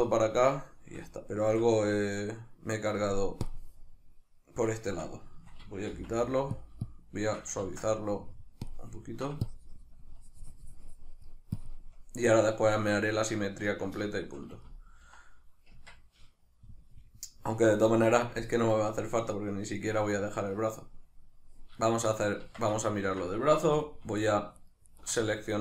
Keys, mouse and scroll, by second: 3.5-4.9 drag, 4.9 Tab, 5.9 f, 6.9-9.1 shift+drag, 7.7 ctrl+z, 9.1 ctrl+middle click, 9.5-13.0 shift+drag, 13.0-14.7 ctrl+middle drag, 15.7 Tab, 21.8 shift+middle click, 22.4 Tab, 22.8 ctrl+middle click, 23.6 3, 24.2 alt+right click, 24.6 alt+shift+right click, 24.8 alt+shift+right click, 25.2-25.6 middle drag.